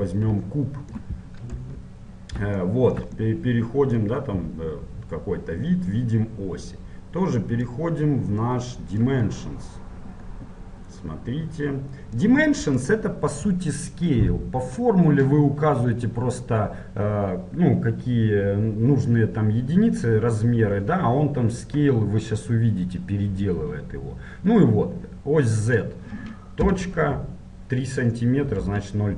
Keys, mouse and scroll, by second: 0.0 shift+a, 0.6-7.6 shift+middle drag, 7.6-29.1 drag.